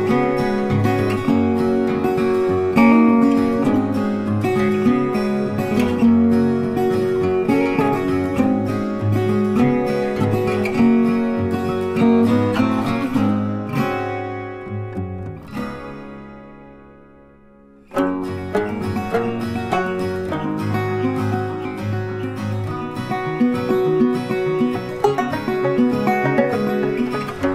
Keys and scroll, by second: 16.7 ctrl+d.